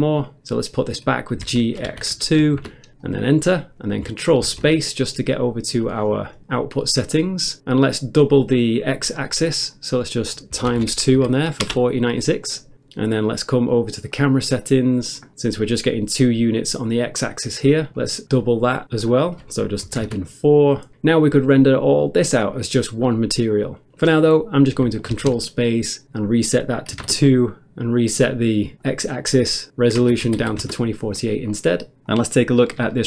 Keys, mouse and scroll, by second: 1.5 g, 1.9 x, 2.2 g, 2.6 Return, 4.4 ctrl+space, 6.0 scroll down 1, 7.1 click, 9.2 click, 9.7 click, 10.6 click, 10.7 shift+8, 11.6 Return, 11.6 2, 14.2 click, 17.9 scroll down 1, 19.0 click, 19.9 4, 20.1 Return, 21.8 ctrl+space, 25.2 ctrl+space, 26.2 click, 27.0 typing, 27.5 Return, 28.1 click, 28.7 click, 29.9-30.4 typing, 30.6 Return, 31.5 scroll down 1, 32.3 shift+middle click, 32.3 scroll up 1.